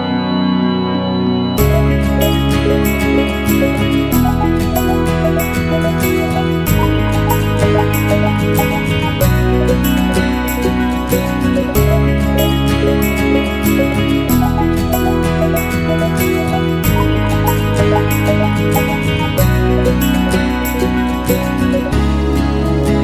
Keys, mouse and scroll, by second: 0.0 alt+middle click, 0.1 alt+click, 0.2 f, 0.5 click, 0.7 ctrl+z, 1.4 right click, 2.0 f, 2.2 alt+click, 2.4 f, 2.7 click, 2.8 ctrl+z, 2.8 f, 3.0 click, 3.2 ctrl+z, 4.2 alt+click, 4.5 alt+middle click, 4.7 click, 5.3 ctrl+z, 5.8 right click, 6.0 alt+click, 6.7 alt+right click, 6.9-13.5 drag, 13.5 alt+right click, 13.6-14.8 alt+drag, 14.8 alt+right click, 15.1 alt+click, 15.9 alt+right click, 16.1 alt+click, 16.2 alt+middle click, 16.6 click, 16.9 ctrl+z, 17.2 right click, 17.9 f, 18.5-22.4 drag, 22.4 alt+middle click, 22.5-23.0 alt+drag.